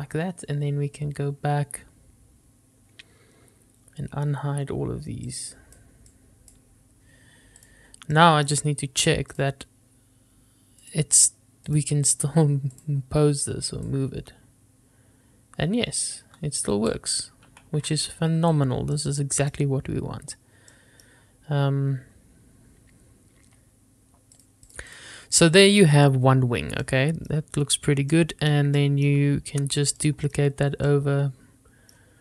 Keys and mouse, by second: 5.6-6.1 drag, 6.4-7.0 drag, 8.4-8.9 middle drag, 11.1-12.0 drag, 14.1-17.2 drag, 18.0 ctrl+z, 19.2 middle click, 21.0 middle click, 24.6 click, 25.8 shift+middle drag, 27.1-27.5 shift+middle drag, 30.5 shift+middle click, 31.1-32.2 middle drag.